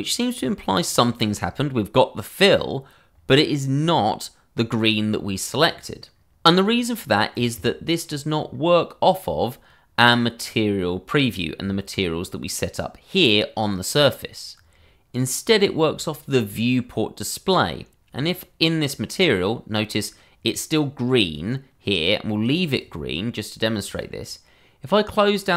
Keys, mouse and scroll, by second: 12.0-14.0 scroll up 1, 15.5 click, 21.2 click, 25.4-25.5 scroll down 1.